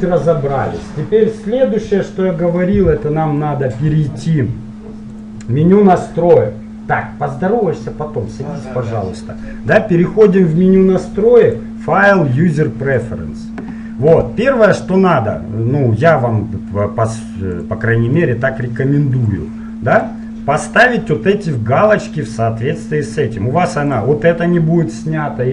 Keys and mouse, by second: 5.3-7.1 drag, 11.5-16.1 drag.